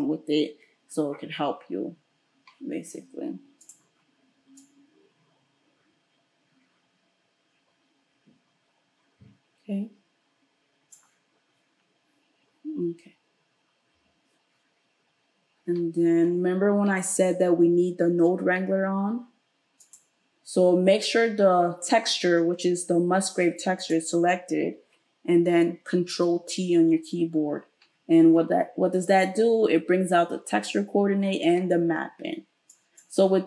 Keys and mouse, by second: 3.7-19.9 middle drag, 19.9 click, 20.0-32.7 middle drag, 26.2 ctrl+t, 32.7-33.4 drag.